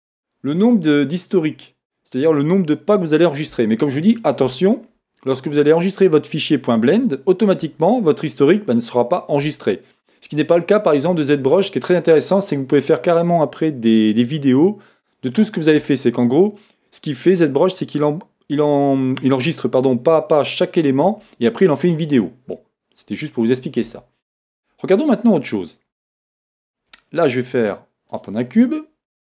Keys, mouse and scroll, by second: 26.3 shift+a.